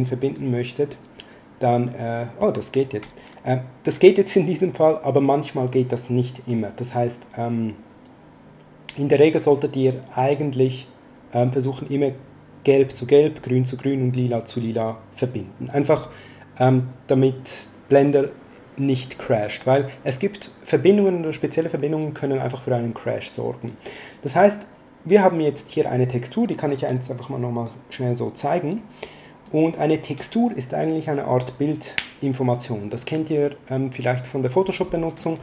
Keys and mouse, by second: 1.6 middle click, 4.7 click, 9.2 click, 23.6 click, 25.5 click, 26.6 click, 29.4 click, 35.1 middle click.